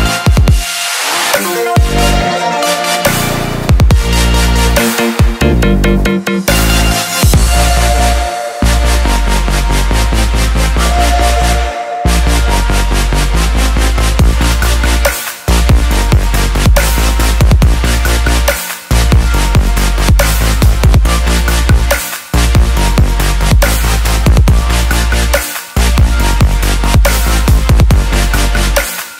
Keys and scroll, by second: 27.8 ctrl+j.